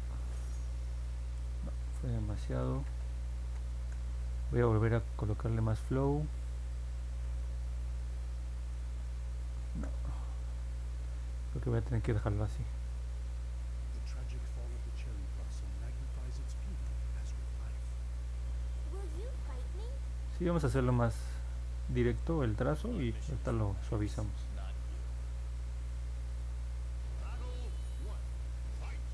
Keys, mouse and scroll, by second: 1.6 ctrl+z, 1.8 ctrl+z, 2.1 ctrl+z, 2.3 ctrl+z, 2.6 ctrl+z, 2.8 ctrl+z, 3.4 ctrl+z, 7.0 click, 8.7 click, 9.6 ctrl+z, 11.4 click, 13.5 click, 14.1 ctrl+z, 15.9 click, 16.6 ctrl+z, 19.6 click, 20.3 ctrl+z, 21.6 click, 23.3 click, 24.8 ctrl+z, 25.7 click.